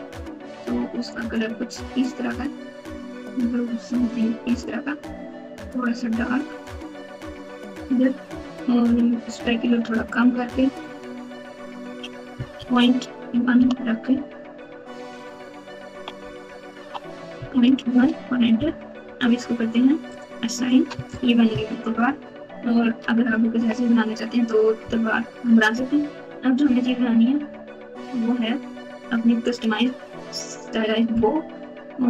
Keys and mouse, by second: 5.4 click, 10.0-11.8 drag, 13.3 i, 13.5 Return, 20.1 click, 20.9 Tab, 21.8-23.7 typing, 24.8 KP_1, 25.7 KP_Add, 25.9 KP_Add, 26.6 KP_8, 27.4 KP_Subtract, 27.8 KP_Subtract.